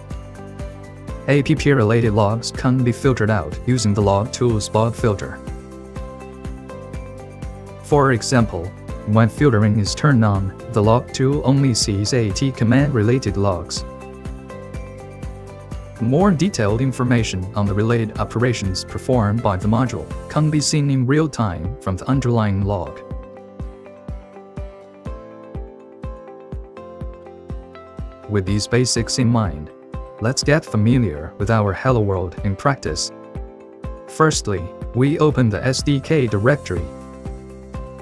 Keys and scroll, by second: 27.3 Caps_Lock, 27.4 typing, 27.7 ctrl+Return, 31.2-32.3 typing.